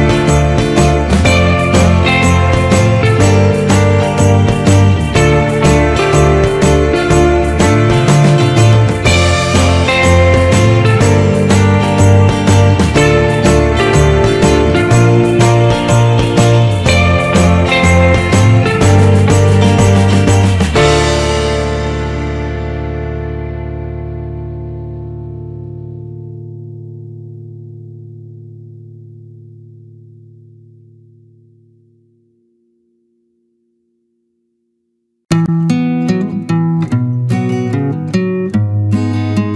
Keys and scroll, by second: 20.0 Return, 33.9 ctrl+=, 34.3 ctrl+space, 38.7 Return.